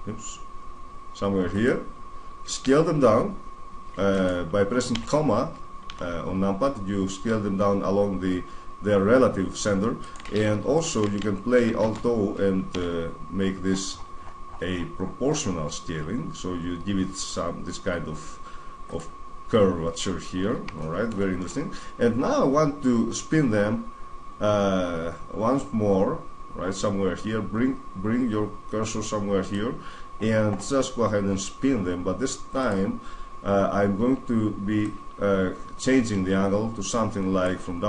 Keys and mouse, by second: 1.4-3.4 drag, 2.4 s, 4.7 ,, 5.7 s, 6.7 click, 9.9-11.6 middle drag, 11.6 alt+o, 12.5 s, 18.7-20.5 drag, 20.5-22.6 middle drag, 29.2-34.3 drag, 34.6-36.5 drag.